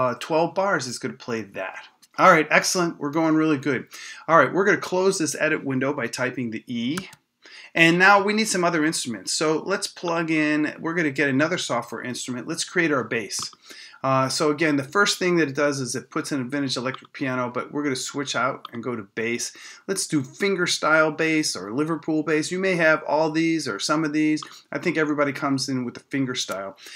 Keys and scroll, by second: 7.0 e.